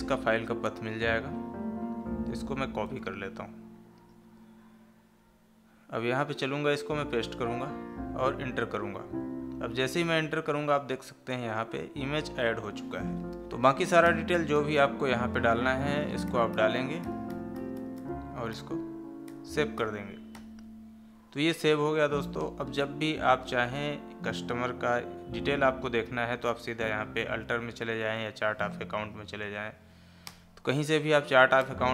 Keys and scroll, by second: 2.7 ctrl+c, 6.9 ctrl+v, 22.3 Escape, 23.5 Escape, 29.2 Down.